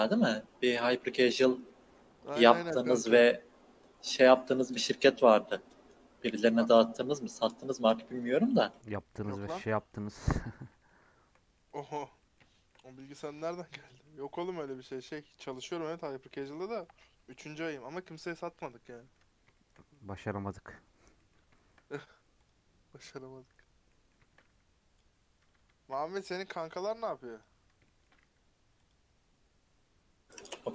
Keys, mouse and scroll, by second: 1.8 scroll down 2, 1.9-2.3 middle drag, 2.3 scroll up 3, 2.5 middle click, 3.3 scroll up 1, 3.7 middle click, 4.0-4.9 scroll up 2, 4.9-5.2 scroll down 3, 5.2-6.7 middle drag, 6.7 scroll up 2, 7.2-8.4 middle drag, 8.4 scroll down 4, 8.6-9.9 middle drag, 9.9 scroll up 2, 10.1-10.5 middle drag, 10.5 scroll down 1, 10.7-11.5 middle drag, 11.5-12.0 scroll down 1, 12.0 click, 12.2-13.3 shift+middle drag, 13.3 KP_Decimal, 14.0-14.7 middle drag, 14.7-16.0 scroll up 1, 16.0 q, 16.3 q, 18.9 middle click, 19.1 scroll up 2, 19.5 shift+middle click, 19.7 scroll up 2, 20.3-20.8 middle drag, 20.8-21.2 scroll down 6, 21.2-21.8 shift+middle drag, 21.8-22.4 scroll down 4, 22.4 click, 23.0 KP_Decimal, 23.8-25.0 middle drag, 25.0 q, 26.8 q, 27.5 scroll up 3, 27.8-28.2 shift+middle drag, 28.2 q.